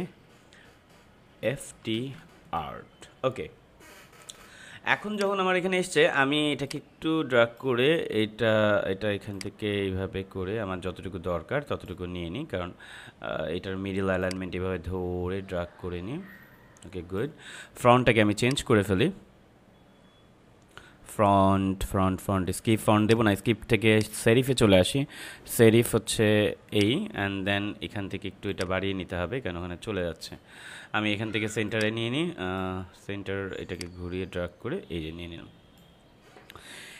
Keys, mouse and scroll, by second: 1.1-3.0 typing, 5.1-18.4 drag, 22.9 click, 26.6-36.9 drag.